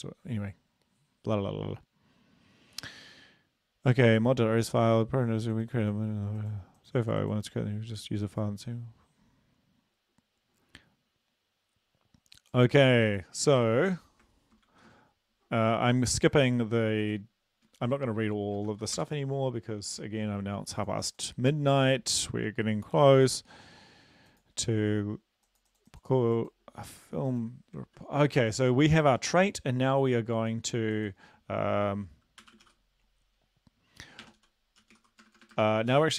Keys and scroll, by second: 13.5 ctrl+`, 14.7 ctrl+v, 17.7 BackSpace, 18.2-18.6 BackSpace, 18.7 ctrl+v, 19.0 Return, 27.9 ctrl+`, 32.4-32.8 typing, 34.2-36.1 typing.